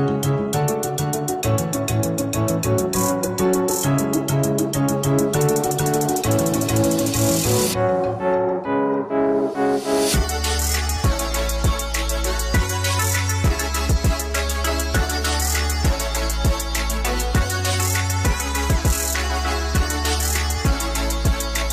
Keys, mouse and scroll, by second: 0.0 middle click, 0.2 click, 0.3 scroll down 2, 0.5 scroll up 2, 0.9 click, 1.3 click, 1.6 middle click, 1.7 scroll up 2, 1.8 middle click, 1.9 ctrl+r, 1.9 right click, 2.0 click, 2.1-4.0 typing, 2.7 Tab, 2.7 middle click, 2.9 middle click, 3.1 scroll up 2, 3.1 click, 3.5 shift+middle click, 3.7 middle click, 3.8 click, 3.9 middle click, 4.1-5.3 middle drag, 4.6 Tab, 5.2-6.3 typing, 5.3 alt+click, 5.4 shift+middle click, 5.6 ctrl+r, 5.8 KP_Enter, 5.9 middle click, 6.3 click, 6.4 middle click, 6.6 scroll down 2, 7.0 scroll up 2, 7.2 ctrl+r, 7.3 right click, 7.4 click, 7.4 middle click, 7.5 g, 7.7 Tab, 7.9 shift+click, 8.0 middle click, 8.1 KP_Enter, 8.4 y, 8.5 right click, 8.6 g, 8.7 click, 8.9 middle click, 9.0 g, 9.2 middle click, 9.4 scroll up 2, 9.4 click, 9.5 Tab, 9.9 middle click, 10.0 click, 10.1 middle click, 10.5 Tab, 10.8 click, 10.8 shift+middle click, 11.3 click, 11.4 click, 11.4 middle click, 11.5 s, 11.9 alt+shift+click, 12.0 middle click, 12.2 Tab, 12.3 click, 12.3-13.7 middle drag, 12.4 scroll up 1, 13.7 click, 13.8 scroll up 1, 13.9 right click, 14.0 click, 14.4 g, 14.5 middle click, 14.6 shift+click, 14.8 scroll up 2, 14.9 i, 15.1 right click, 15.3 click, 15.5 alt+click, 15.6 middle click, 16.1-16.5 scroll up 3, 16.2 ctrl+r, 16.5 click, 16.6-17.6 typing, 16.9 KP_Divide, 16.9 middle click, 17.2 click, 17.4 click, 17.5 middle click, 17.7 click, 17.8 middle click, 17.8 ctrl+z, 18.2 middle click, 18.4 click, 18.5 middle click, 18.7 scroll up 2, 19.0 alt+click, 19.1-20.3 middle drag, 19.1 scroll down 2, 19.2 Tab, 19.4-20.0 scroll up 4, 19.6 KP_0, 20.0 Tab, 20.3 Tab, 20.4 scroll down 1, 20.5 click, 20.6 shift+middle click, 20.8-21.2 scroll up 1, 21.2 click, 21.4 middle click, 21.4 s, 21.5-21.7 scroll down 2, 21.6 middle click.